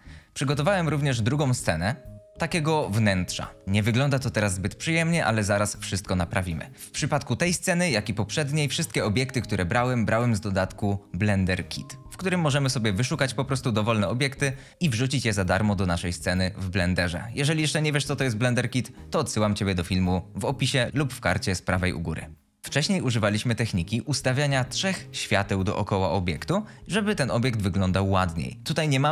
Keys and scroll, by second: 6.7 `, 6.7 a.